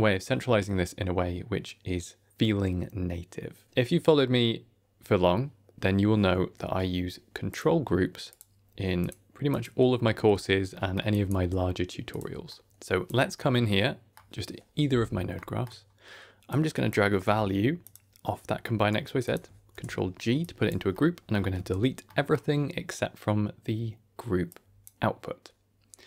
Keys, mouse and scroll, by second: 6.3 n, 7.4 click, 8.2 click, 8.9 click, 9.4 click, 10.2 n, 10.6 middle click, 11.0 click, 11.3 g, 12.4 middle click, 12.7 click, 13.2 middle click, 15.2 middle click, 16.4-17.8 drag, 18.5 middle click, 19.1 click, 19.6 ctrl+g, 20.3 click, 20.8 middle click, 21.4 x, 21.9 middle click, 24.4 click.